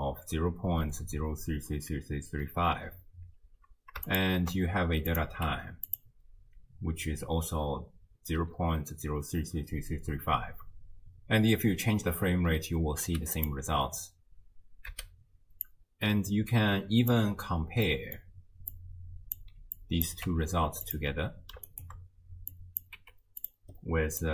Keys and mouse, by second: 2.8 space, 3.3 space, 4.1 ctrl+shift+click, 5.1 click, 5.5 g, 13.4 click, 14.9 x, 15.7-17.1 drag, 17.9 click, 17.9 right click, 18.7-19.4 drag, 19.8 click, 20.3 g, 21.7 ctrl+click, 22.5 click, 23.0 g, 24.2 click.